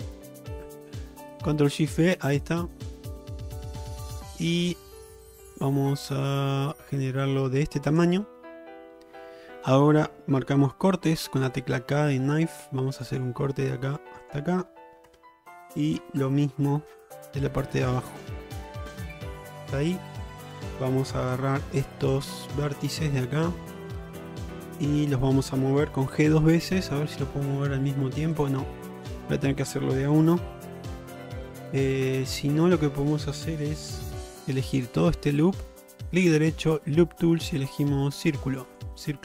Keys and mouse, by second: 11.7 k, 16.7 k, 21.4 1, 22.1 click, 22.8 click, 26.2 g, 34.2 2, 34.8 alt+click, 36.2-38.8 right drag.